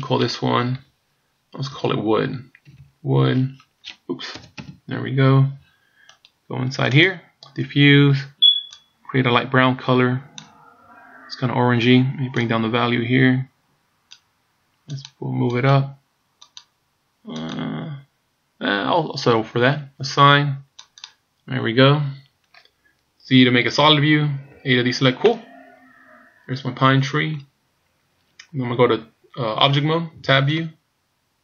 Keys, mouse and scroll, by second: 2.8 o, 6.9 click, 16.4 click, 17.4 click, 20.9 click, 23.8 z, 24.6 a, 25.2 middle click, 27.6 scroll down 2, 30.4 Tab.